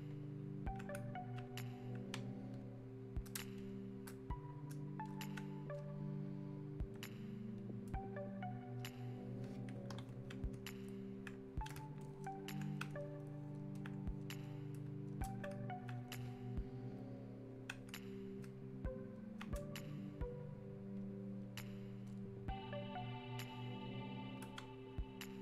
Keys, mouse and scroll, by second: 10.9 alt+click, 13.3-18.2 alt+drag, 18.4 click, 18.5-21.0 alt+drag.